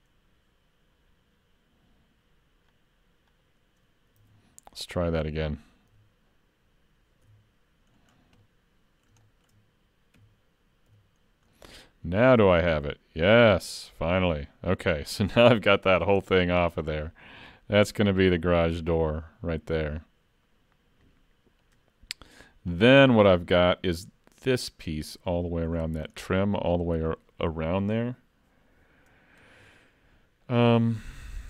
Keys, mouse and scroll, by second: 4.2 alt+a, 5.9 l, 7.3 l, 8.1-8.5 scroll down 5, 8.4 middle click, 9.3 shift+middle click, 10.2 3, 10.9 l, 11.2-11.5 scroll up 3, 11.5 middle click, 12.4 click, 15.5 scroll down 4, 15.8 shift+middle click, 16.2 middle click, 16.6-17.5 scroll up 1, 17.5 click, 17.5-18.6 scroll up 2, 22.5 scroll down 1, 22.8 middle click, 25.0-25.3 scroll down 2, 25.3 shift+middle click, 26.4 middle click, 30.5 middle click.